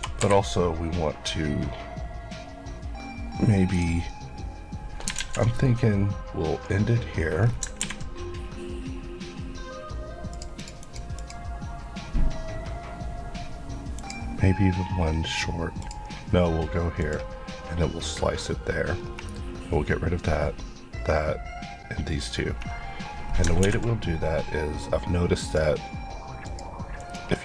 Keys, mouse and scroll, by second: 3.7 click, 3.8 click, 5.2 alt+z, 5.6-7.4 scroll up 1, 7.5 scroll down 1, 10.3 click, 18.9 scroll, 19.0-23.2 scroll up 1, 23.2 scroll, 23.5 scroll down 2, 25.5 click.